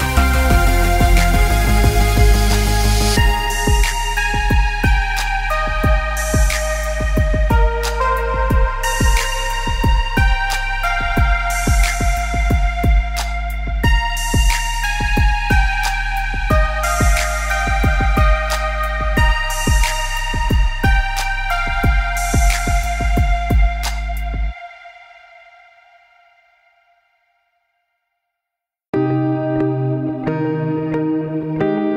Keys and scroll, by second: 17.6 ctrl+=.